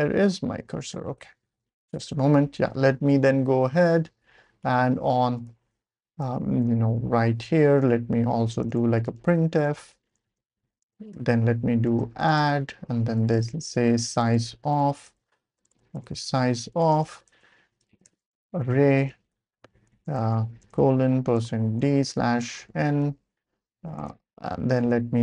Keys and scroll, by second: 0.0-0.1 typing, 1.9 ctrl+alt+super+p, 2.9 Up, 3.5-3.8 Up, 3.9 Up, 4.0 Up, 4.6 Up, 4.7 Up, 5.4 Return, 8.3-25.2 typing, 19.5 Right.